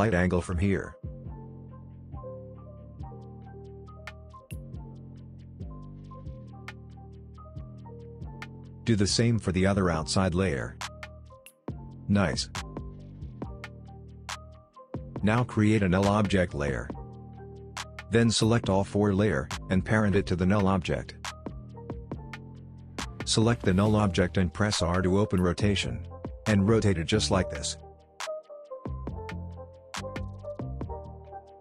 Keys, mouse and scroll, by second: 8.8-9.5 click, 10.1-10.6 drag, 12.8-14.7 drag, 15.2 right click, 15.8 click, 18.3-19.7 drag, 24.2 click, 25.1 r, 26.5-29.3 drag.